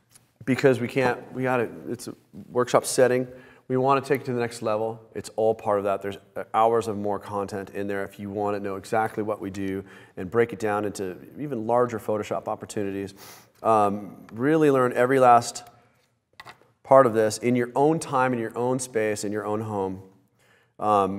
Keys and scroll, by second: 13.7 super+-, 14.2 super+=, 15.1 space, 16.0 space.